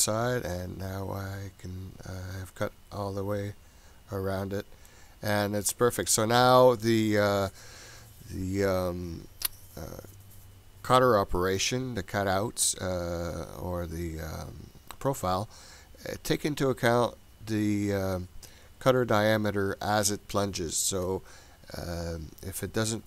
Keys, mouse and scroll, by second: 0.5-5.0 middle drag.